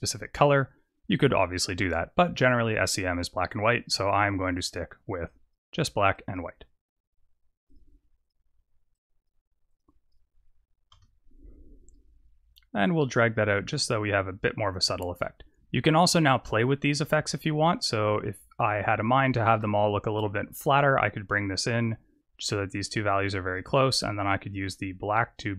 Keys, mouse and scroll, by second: 2.7 click, 9.8 click, 10.8 KP_0, 12.7 click, 15.2 click, 20.4 shift+click, 23.8 shift+click.